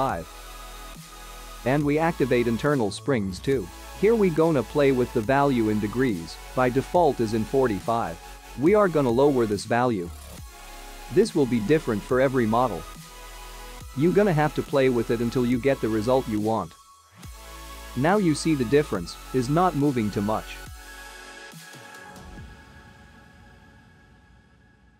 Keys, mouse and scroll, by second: 1.5 click, 1.5-3.1 scroll down 8, 3.1 click, 7.5 click, 12.5 click, 12.9 space, 20.9 click, 21.9 space, 23.0 click.